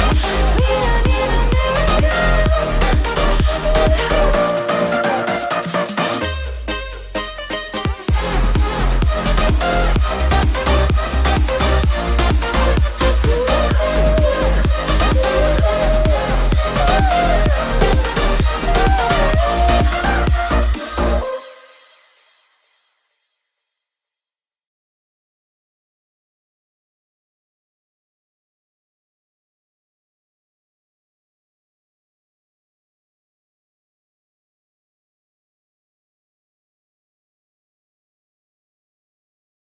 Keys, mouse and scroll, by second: 0.6 click, 1.2-1.7 scroll up 1, 1.7 click, 2.2 right click, 3.0 click, 3.4 scroll down 1, 3.9 middle click, 4.8 click, 5.2 scroll up 1, 5.6-7.1 middle drag, 7.1 l, 7.7 click, 9.7 space, 9.9-10.3 scroll down 1, 10.5 shift+x, 10.8 click, 12.0 Delete, 12.8-13.2 scroll up 1, 13.4-14.8 drag, 14.8 m, 15.0 click, 15.0 click, 16.3 Right, 17.1-18.5 typing, 19.0 Return, 20.5 f, 20.9 click, 21.6-22.7 typing, 22.3 Return, 23.2 click, 24.3 m, 24.4-24.9 scroll up 1, 25.3 ctrl+click, 26.3 Up, 26.9-29.6 shift+middle drag, 29.6 click, 30.3-30.7 typing, 31.1 Return, 31.5 scroll down 1, 32.3 click, 33.0 scroll up 1, 33.2 click, 34.7-35.6 scroll up 1, 36.0 m, 36.5 ctrl+click, 38.3 Right, 39.5 click.